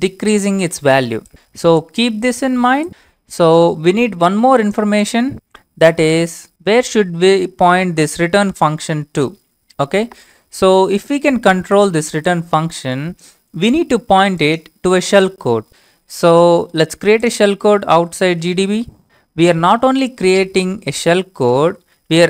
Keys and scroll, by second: 5.3 alt+Tab, 15.7 alt+Tab, 17.8-19.0 typing, 20.3-22.2 typing.